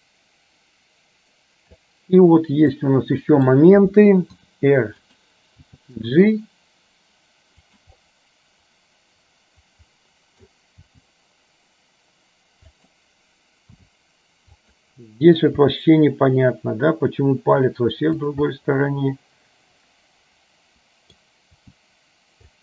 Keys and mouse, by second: 0.0-1.9 drag, 2.8 middle click, 4.4 r, 5.7 g, 8.0 click, 8.7-10.5 middle drag, 10.9 g, 13.9 r, 15.7 g, 18.7-21.3 middle drag, 21.5 g.